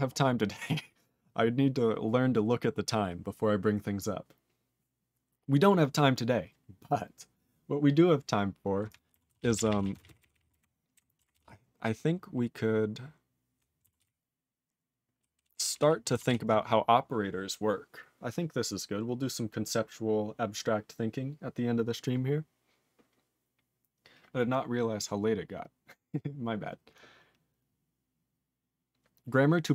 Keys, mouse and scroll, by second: 9.3 ctrl+s, 9.4 ctrl+p, 9.5 ctrl+p, 9.7 ctrl+p, 9.8 ctrl+a, 9.9 ctrl+space, 10.0 ctrl+e, 10.1 ctrl+n, 10.2 ctrl+n, 10.3 ctrl+n, 10.4 ctrl+e, 10.9 ctrl+g, 11.3 ctrl+s, 11.4-13.6 ctrl+p, 14.0 ctrl+s, 14.0-15.2 ctrl+n, 15.5 ctrl+p, 15.7 ctrl+p, 16.3 ctrl+s.